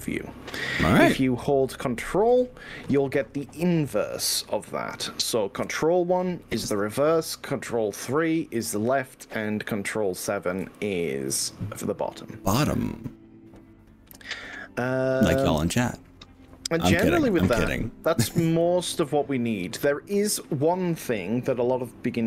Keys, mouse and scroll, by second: 5.6 ctrl+KP_1, 8.8 ctrl+KP_3, 10.6 ctrl+KP_7.